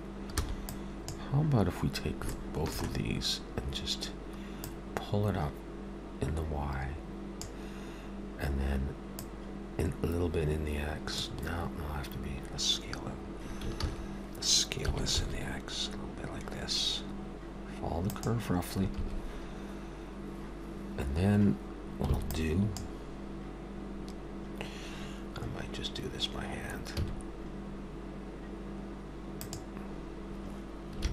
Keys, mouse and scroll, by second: 0.3 b, 2.4 shift+middle click, 4.6 click, 9.2 click, 11.2 click, 14.9 ctrl+s, 22.1 b, 27.0 g.